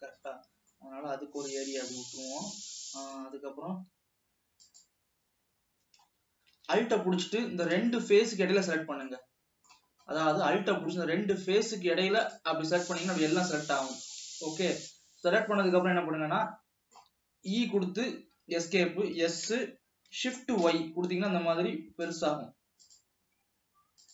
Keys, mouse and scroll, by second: 0.4 scroll down 1, 0.7 middle click, 1.3 e, 3.6 e, 4.0 e, 6.3-6.8 scroll up 2, 6.9 alt+a, 8.3 scroll up 3, 8.3-9.0 middle drag, 9.0 shift+scroll down 2, 9.4 middle click, 10.3-11.0 scroll down 1, 11.0 scroll down 1, 12.3 alt+click, 13.2-13.5 scroll down 2, 13.5-15.3 middle drag, 16.8 middle click, 17.8 e, 19.5 s.